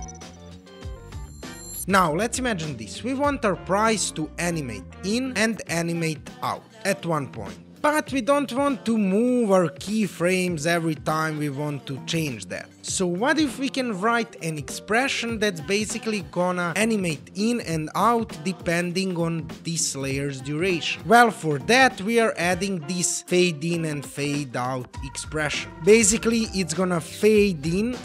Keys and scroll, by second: 7.8 s, 22.7 super+v.